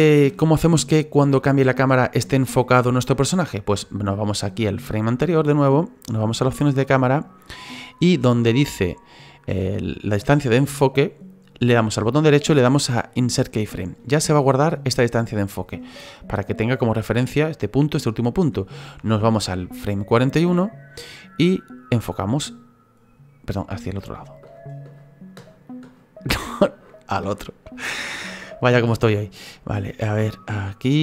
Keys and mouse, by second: 0.4 Right, 2.3 Right, 6.4 click, 12.1 right click, 13.1 click, 19.6 Right, 21.9 click.